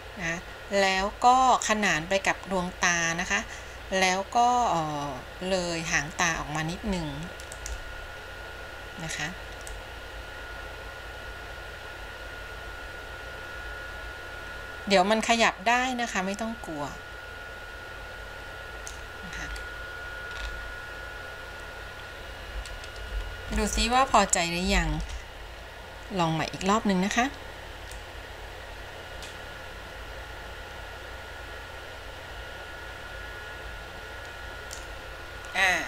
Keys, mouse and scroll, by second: 9.9-19.2 drag, 19.6-20.5 scroll down 3, 20.5-20.9 scroll up 3, 25.2 ctrl+z, 28.1-35.1 drag.